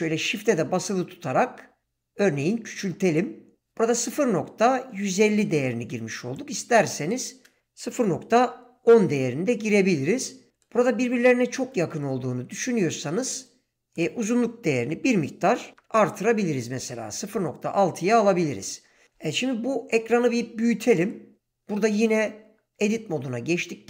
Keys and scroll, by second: 7.6 BackSpace, 8.1 0, 8.5 Return, 15.1 ., 15.7 6, 16.2 Return, 19.9 ctrl+space, 22.7 Tab.